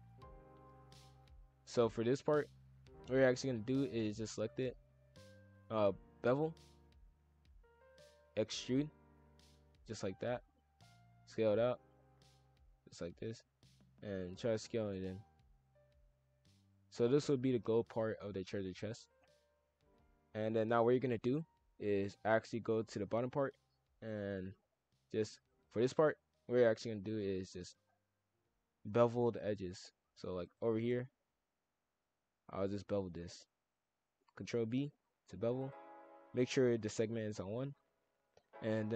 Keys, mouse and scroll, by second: 2.7 click, 5.4 ctrl+b, 7.7 shift+f, 8.8 e, 10.0 s, 12.0 click, 13.3 s, 14.7 shift+f, 20.3-21.3 drag, 21.7 shift+f, 23.4-24.4 drag, 24.4 shift+f, 25.2 click, 27.6-29.9 drag, 30.4 shift+click, 30.7 shift+f, 31.9 shift+click, 32.4 shift+click, 32.7 shift+f, 33.7 ctrl+b, 35.9 shift+f, 37.4 shift+f.